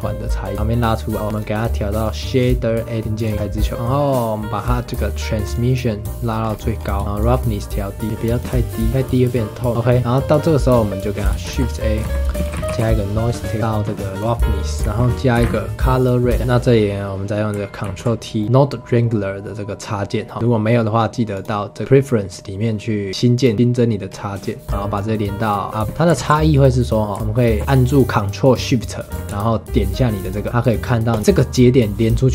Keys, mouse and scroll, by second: 0.4 click, 1.2 n, 1.3-3.3 drag, 3.3 scroll up 3, 3.5-5.5 middle drag, 5.5 click, 6.4-7.0 scroll up 4, 7.0 shift+middle click, 7.2 click, 8.9 click, 9.7-11.4 middle drag, 11.4 shift+a, 13.6-14.4 drag, 14.4 middle click, 14.8 shift+a, 16.3 middle click, 16.4 click, 17.8 ctrl+t, 18.4-21.3 middle drag, 21.3-23.3 drag, 23.3 click, 24.0-24.4 scroll down 1, 24.4 middle click, 24.6 scroll up 5, 24.9-25.8 drag, 25.8 middle click, 26.1 ctrl+z, 26.5 middle click, 27.1 ctrl+shift+click, 30.2 ctrl+shift+click, 31.1 ctrl+shift+click.